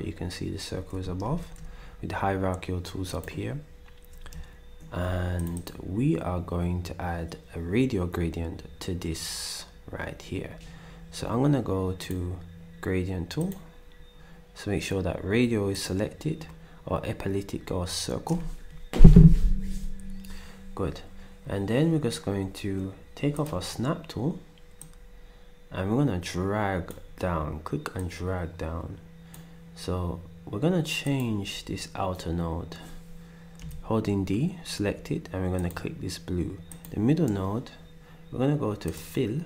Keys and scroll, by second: 1.4 ctrl+z, 33.6 d.